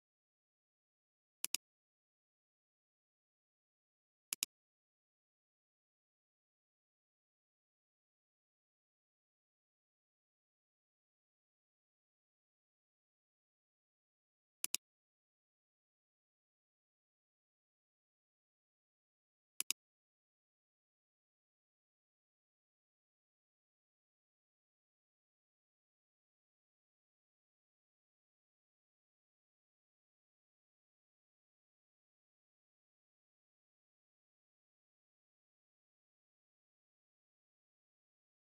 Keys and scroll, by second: 17.6 ], 18.4 ].